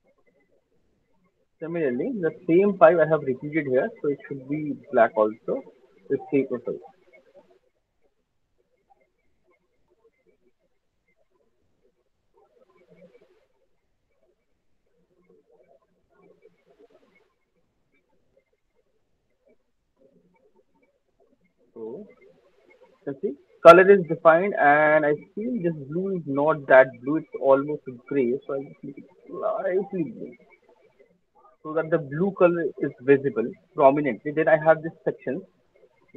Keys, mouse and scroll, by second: 0.4 alt+click, 0.9 alt+middle click, 1.5 alt+middle click, 1.9 alt+middle click, 2.1 alt+right click, 2.4-2.7 alt+scroll, 2.9 alt+click, 2.9 alt+middle click, 3.3 alt+scroll, 3.4 alt+middle click, 3.4 alt+right click, 3.7 click, 4.4 alt+middle click, 5.0 alt+right click, 5.6 click, 6.2 click, 6.4 alt+click, 6.6 ctrl+z, 7.0 ctrl+z, 7.7 click, 8.7 click, 12.4 click, 13.1 click, 15.0 alt+click, 15.0 alt+middle click, 15.3 alt+click, 15.3 alt+right click, 16.0 click, 16.7 alt+right click, 16.9 alt+right click, 17.5 alt+middle click, 18.1 alt+click, 18.3 alt+middle click, 18.7 alt+right click, 19.1 alt+middle click, 19.5 alt+click, 20.2 alt+middle click, 20.8 click, 21.0 alt+scroll, 22.6 alt+middle click, 22.8 alt+right click, 22.8 alt+middle click, 23.3 alt+click, 23.3 alt+right click, 23.9 alt+middle click, 24.7 middle click, 24.7 alt+middle click, 24.7 scroll, 25.5 click, 25.5 alt+scroll, 26.6-27.0 scroll, 27.8 alt+middle click, 28.0 click, 31.6 click, 36.0 click.